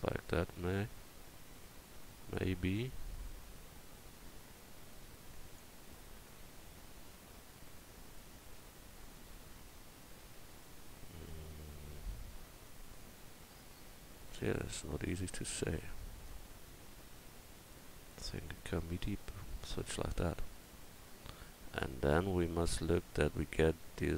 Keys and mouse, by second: 0.7 click, 12.7 middle click, 18.5-20.0 drag, 20.0 middle click, 20.5-21.8 middle drag, 21.8-24.1 drag.